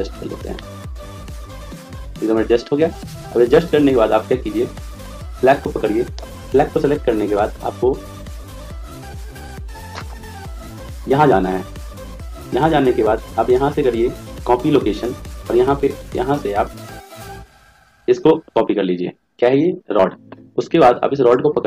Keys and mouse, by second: 0.6-2.0 middle drag, 5.0-7.3 right drag, 11.8 click, 13.3 click, 16.0 click, 21.1-21.6 right drag.